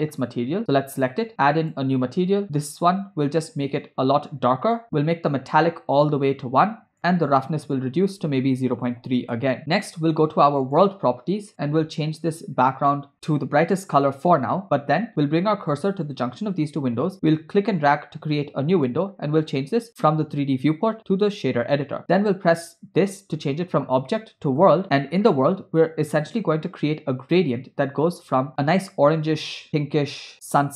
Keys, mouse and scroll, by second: 0.6 click, 1.6 click, 2.7 click, 5.1-5.4 scroll down 3, 6.2 click, 7.7-9.3 drag, 9.6 space, 10.7 click, 11.5 click, 17.1-19.0 drag, 19.9-21.8 drag, 22.6-24.8 drag, 24.8 middle click, 24.9-25.4 scroll up 8, 25.4 scroll down 1.